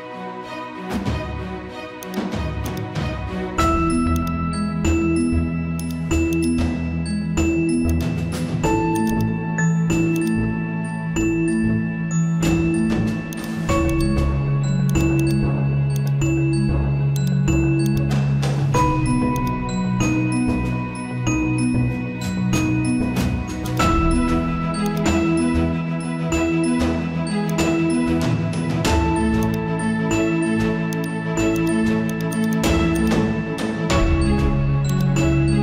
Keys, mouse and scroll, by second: 0.4-1.6 typing, 2.0-27.5 drag, 6.7 typing, 9.4 typing, 16.1 typing, 32.9 click.